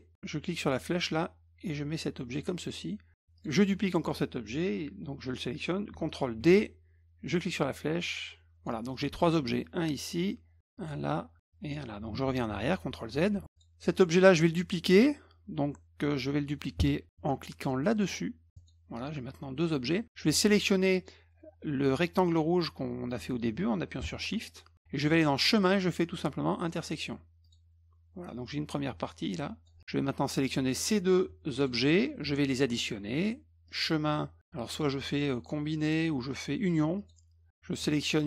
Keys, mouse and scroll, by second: 0.7-2.3 drag, 3.4 click, 6.4 ctrl+d, 7.5-8.6 drag, 8.9 click, 9.6-10.0 drag, 10.6 drag, 11.4 drag, 12.2 ctrl+z, 12.7 ctrl+z, 13.1 ctrl+z, 13.5 click, 18.5 click, 24.5 shift+click, 25.4 click, 27.4 click, 28.4-29.6 drag, 30.3 click, 31.6 shift+click, 33.7 click, 37.0 click, 38.1 shift+click.